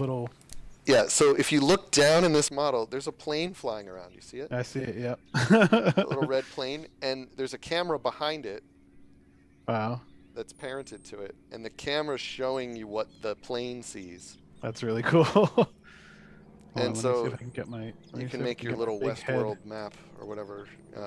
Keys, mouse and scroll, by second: 0.4 click, 1.2 click, 1.4-2.2 typing, 12.9 s, 20.9 a.